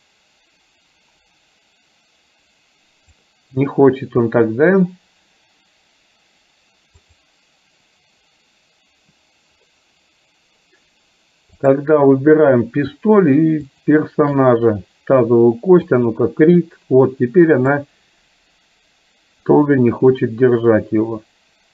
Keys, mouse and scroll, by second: 7.2 click, 11.6 click, 13.7 shift+click, 16.0 click, 18.0-21.7 drag.